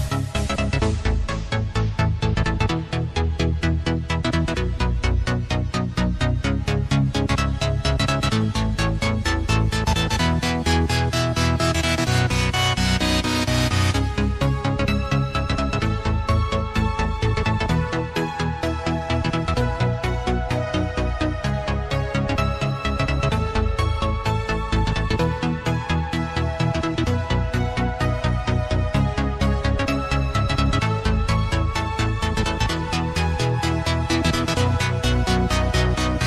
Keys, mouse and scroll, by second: 0.1 click, 6.3-7.0 scroll down 1, 7.0 click, 9.1 ctrl+Return, 11.2 l, 12.0 right click, 13.1 click, 15.8 Return, 17.0 Delete, 18.9 ctrl+d, 19.9-20.2 scroll down 1, 21.8 click, 23.1-23.5 scroll down 1, 23.9-24.4 scroll up 1, 24.4-25.3 scroll down 1, 25.7 click, 35.5 scroll up 1, 35.8-36.2 scroll down 1.